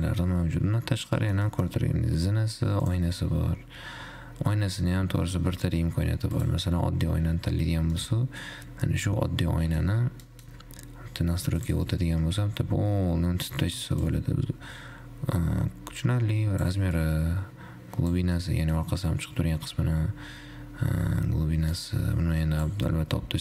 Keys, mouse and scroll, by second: 0.4 click, 1.4 scroll down 3, 1.4-3.3 middle drag, 3.3-6.4 drag, 7.4-7.8 scroll up 1, 7.9 `, 8.4-10.9 middle drag, 10.9-11.9 scroll up 1, 11.9 click, 12.8-13.3 scroll down 3, 13.3-14.4 scroll up 2, 14.4-18.6 drag, 18.6-21.9 middle drag, 21.9-23.4 drag.